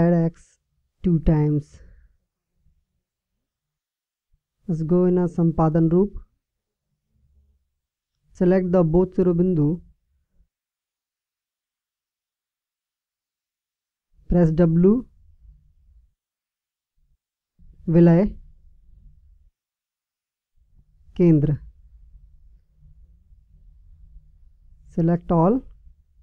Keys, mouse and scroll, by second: 5.5 Tab, 7.3-9.0 right drag, 10.9-12.4 right drag, 16.0 w, 25.3 a.